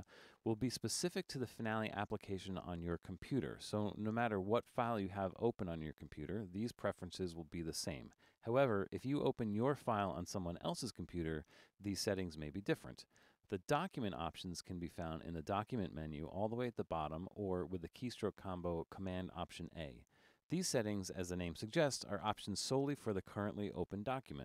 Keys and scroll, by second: 19.8 alt+super+a.